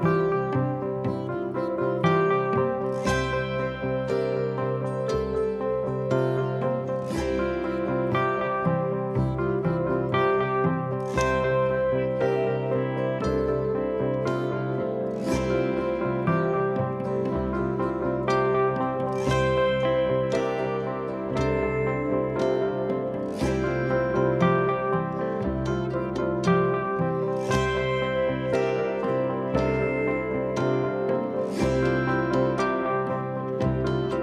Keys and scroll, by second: 0.9 p, 1.8 p, 3.6 p, 5.7 p, 6.8 p, 8.5 p, 9.7 p, 10.5 p, 11.4 p, 12.3 p, 13.4 p, 14.3 p, 16.2 p, 17.8 p, 18.6 p, 19.6 p, 20.6 p, 21.5 p, 23.3 p, 24.2 p, 25.7 p, 27.0 p, 28.6 p, 29.6 p, 30.7 p, 31.8 p, 32.8 p, 33.6 p.